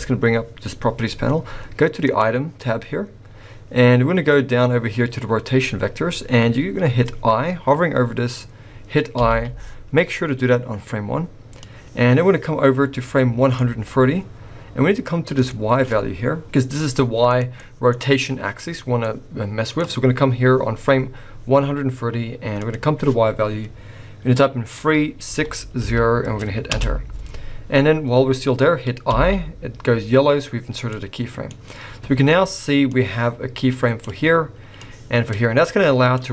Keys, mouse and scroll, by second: 0.0 n, 2.1 click, 9.2 i, 11.6 click, 15.4 click, 17.6 middle click, 19.0 middle click, 22.6 click, 29.1 i, 30.9 middle click, 32.9 click, 34.8 click.